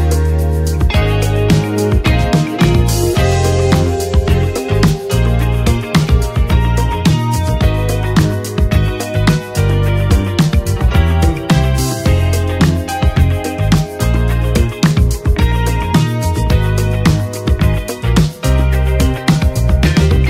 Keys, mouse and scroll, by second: 1.2 right click, 2.8-9.6 drag, 11.7-15.0 drag, 15.6 ctrl+d, 17.4 click, 18.7 click.